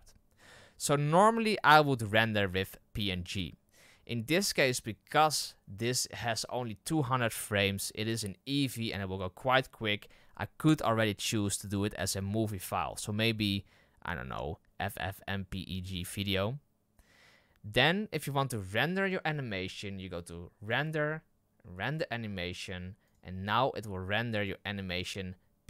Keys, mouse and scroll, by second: 23.4-24.6 drag.